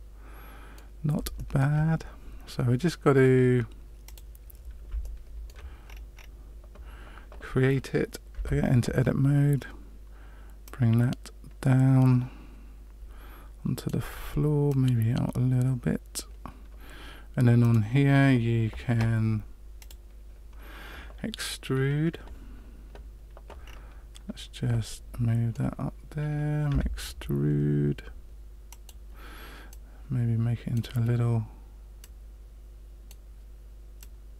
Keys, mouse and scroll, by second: 1.3 shift+middle click, 4.0 click, 5.0 shift+middle click, 5.8-6.3 scroll up 6, 8.3 Tab, 10.6 right click, 14.6 right click, 17.6 right click, 19.7 click, 23.6 scroll down 3, 24.8 shift+middle click, 26.6 e, 29.7 right click, 31.9 right click, 33.9 right click.